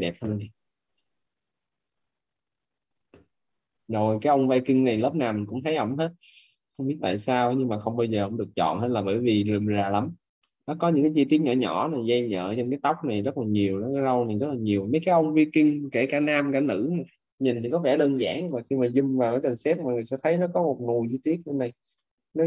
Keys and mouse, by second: 1.3 click, 6.5 middle click, 9.3 middle click, 14.1 middle click, 18.3 middle click, 21.9 middle click.